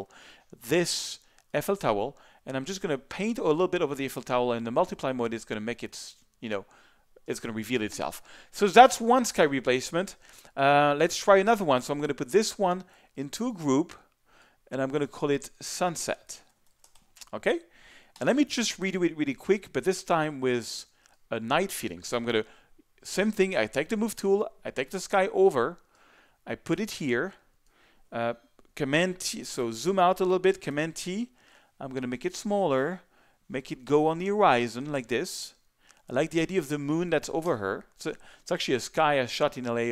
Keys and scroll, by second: 16.0-17.4 typing, 18.1 Return, 29.6 z, 30.4 alt+super+z, 30.7 alt+super+t, 37.4 Return.